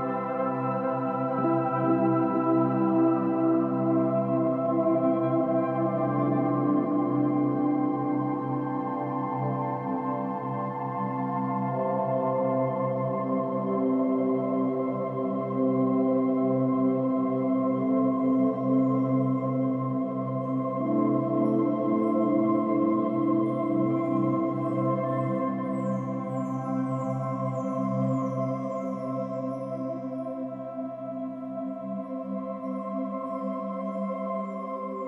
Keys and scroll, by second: 0.2 space, 2.0 space, 2.4 space, 7.5 ctrl+alt+shift+n, 7.6 ctrl+alt+g, 17.9 ctrl+-, 20.5 space.